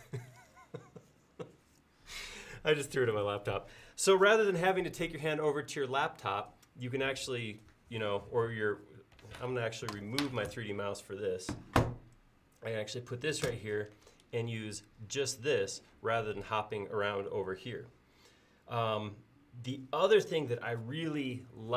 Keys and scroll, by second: 0.0-0.6 typing.